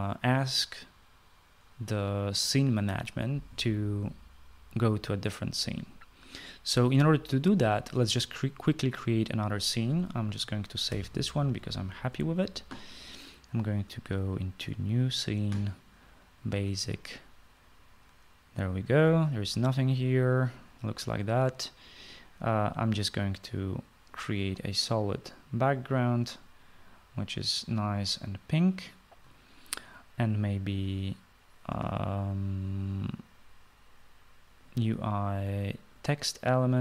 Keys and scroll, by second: 11.9 ctrl+s.